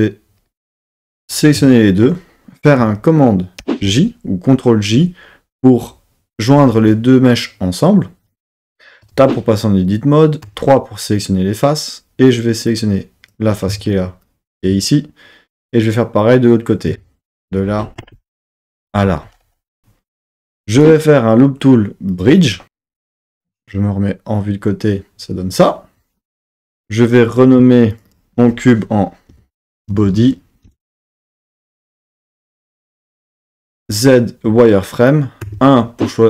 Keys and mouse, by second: 0.6 Tab, 1.2 shift+click, 3.6 super+j, 9.0 Tab, 10.4 3, 12.7 click, 14.6 click, 16.9 shift+click, 17.4 shift+click, 19.0 click, 20.7-22.4 right drag, 23.4 KP_3, 27.3 click, 28.0-30.7 drag, 33.8 z, 35.5 1.